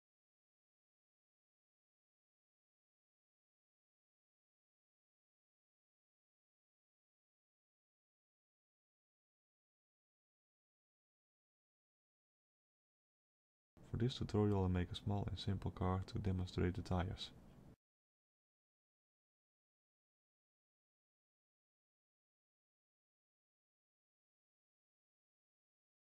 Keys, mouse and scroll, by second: 5.6 middle click, 6.3 shift+middle click, 8.1 a, 8.9 shift+click, 9.3 shift+click, 13.6 shift+d, 17.0-20.1 scroll down 4, 17.5 middle click, 20.5 alt+a, 21.4 middle click, 22.4 shift+middle click, 23.8 a, 24.9 shift+d.